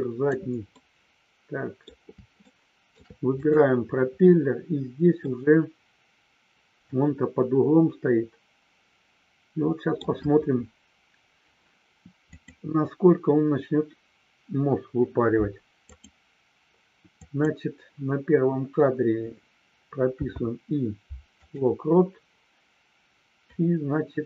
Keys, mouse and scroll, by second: 0.0 click.